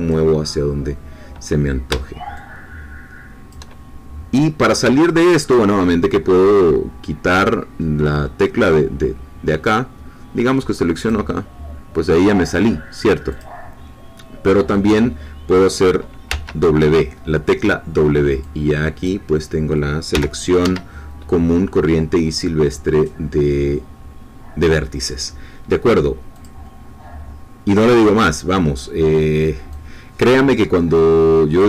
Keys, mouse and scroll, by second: 3.6 shift+click, 4.4 scroll down 2, 4.9 shift+middle click, 11.0 click, 13.3 click, 16.2 w, 18.6-20.1 drag, 20.1 g, 20.6 Escape, 26.3 click, 29.7-31.6 drag.